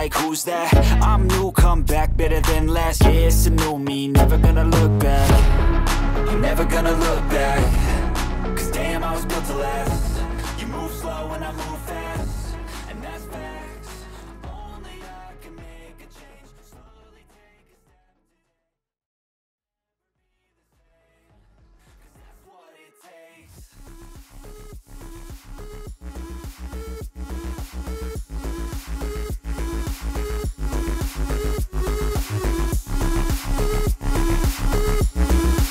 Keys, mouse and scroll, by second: 0.2 ctrl+double click, 0.3 ctrl+space, 0.5 ctrl+click, 0.5 ctrl+space, 0.7 ctrl+click, 0.8 ctrl+space, 2.1 double click, 3.8 alt+space, 3.8 alt+click, 4.0 alt+double click, 4.2 alt+space, 4.7 alt+space, 5.9 alt+space, 6.1 alt+click, 6.4 alt+space, 6.8 alt+click, 7.8 ctrl+z, 9.0 double click, 31.9 right click.